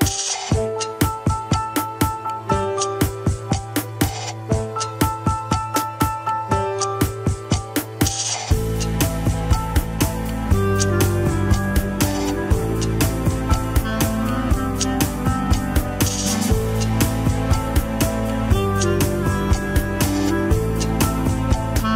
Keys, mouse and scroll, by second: 1.8 Tab, 2.1 click, 2.5 Tab, 3.0 r, 5.4 KP_3, 5.6 scroll down 3, 5.7 alt+z, 6.2 r, 7.1 KP_1, 7.4-7.8 scroll up 5, 7.5 alt+z, 8.1 alt+z, 9.5 alt+z, 10.1 scroll down 1, 10.3 ctrl+Tab, 11.0 shift+h, 11.4 click, 11.7 Tab, 12.2 click, 13.4 click, 14.6 KP_3, 14.8-16.1 scroll up 1, 16.3-18.3 drag, 18.6 click, 19.3 g.